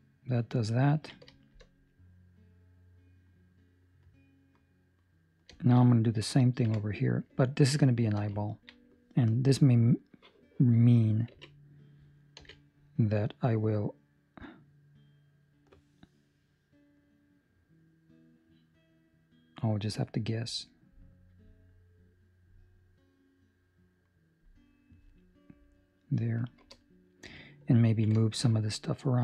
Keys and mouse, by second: 0.8 ctrl+middle click, 1.5 shift+middle click, 1.9 middle click, 5.5 shift+middle click, 5.8 middle click, 6.6 KP_7, 7.5 ctrl+middle click, 8.1 shift+middle click, 8.3 ctrl+middle click, 11.3 k, 27.7 ctrl+middle click, 28.1 shift+middle click, 28.5 middle click.